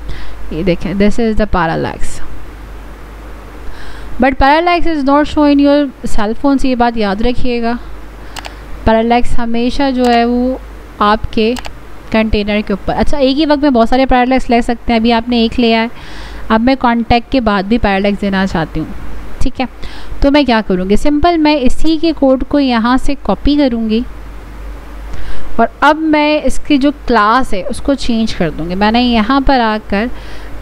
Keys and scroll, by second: 25.9 ctrl+c, 29.6 ctrl+v.